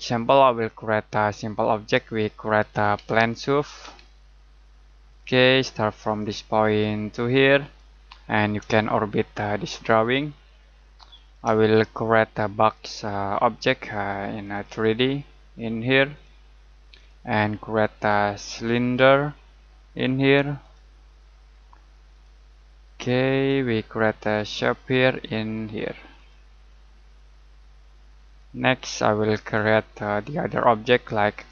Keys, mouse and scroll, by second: 2.4-4.3 typing, 5.1 click, 6.1 click, 7.6 click, 8.1 middle click, 12.7 click, 14.4 click, 17.0 click, 20.6 click.